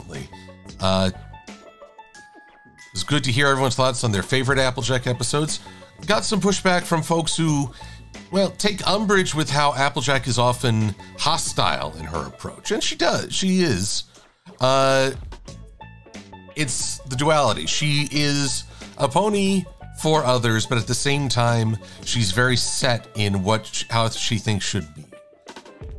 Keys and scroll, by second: 17.3 a, 18.0 shift+super+a, 21.7 shift+x, 25.1 e.